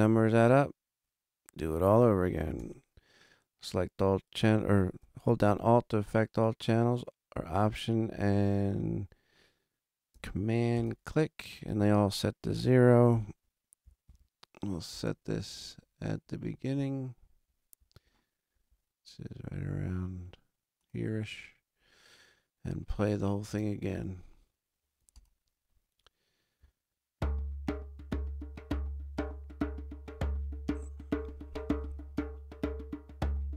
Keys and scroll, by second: 13.9 super+=, 23.3 space, 28.9 super+=.